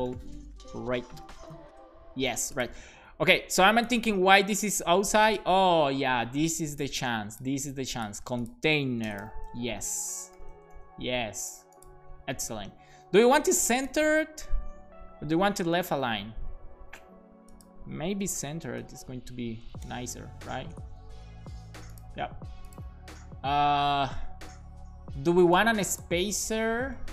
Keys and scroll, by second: 1.3 alt+shift+f, 1.7 super+s, 7.6 super+x, 9.2 super+v, 9.4 super+s, 10.3 alt+shift+f, 10.7 super+s, 18.2-19.5 typing, 19.9 Down, 20.7 Return.